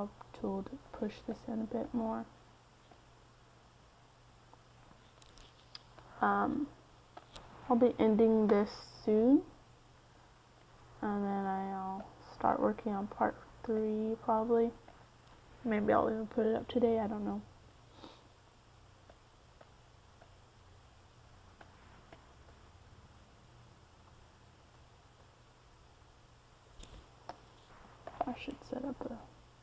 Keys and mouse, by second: 2.3-3.9 middle drag, 3.5 f, 4.5-10.4 drag, 10.4 middle click, 12.4 x, 13.3 f, 15.0-20.4 drag, 20.4-22.4 middle drag, 22.4-25.9 drag, 26.1 click, 27.0 f, 28.9-29.6 drag.